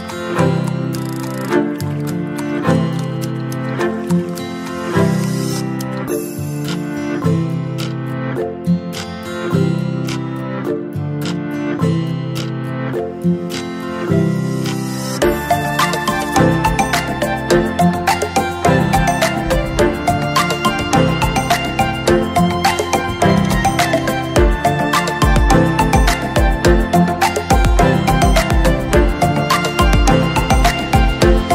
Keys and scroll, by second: 1.9 ctrl+<, 3.2 ctrl+-, 16.1 ctrl+shift+j.